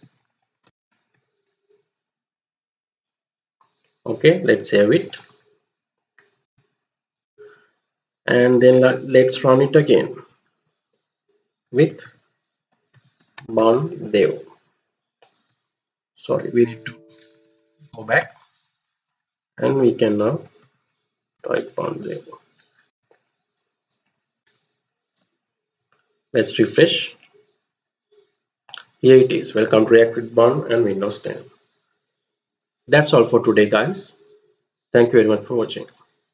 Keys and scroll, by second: 0.0-1.4 typing, 5.0 ctrl+x, 6.4-7.7 typing, 9.7 Up, 10.2 Up, 11.6-17.9 typing, 18.1 Return, 20.1-22.1 typing, 22.8 Return, 24.3 alt+Tab.